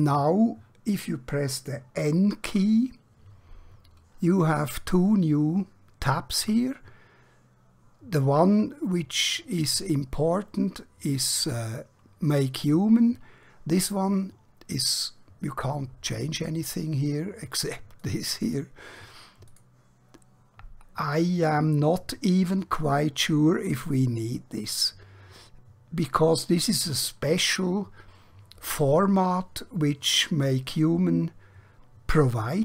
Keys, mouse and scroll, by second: 2.5 n, 13.7 click.